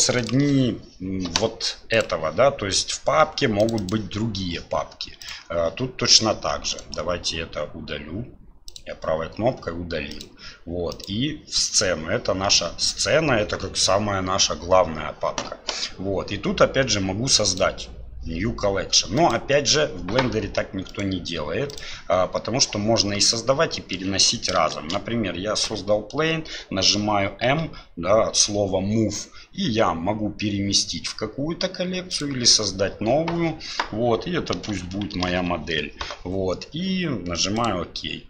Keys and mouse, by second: 10.1 click, 11.0 click, 17.4 click, 19.2 click, 23.0-24.0 middle drag, 24.7 shift+a, 27.5 m.